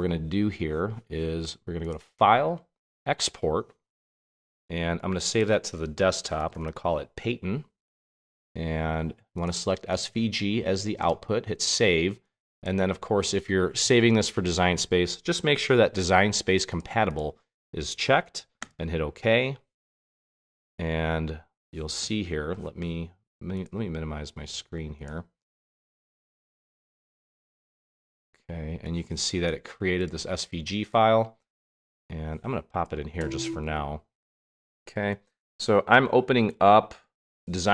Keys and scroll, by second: 5.9-7.1 typing, 33.6 super+Tab, 34.7 super+Tab, 35.4 super+Tab, 36.4 super+Tab, 37.1 super+Tab.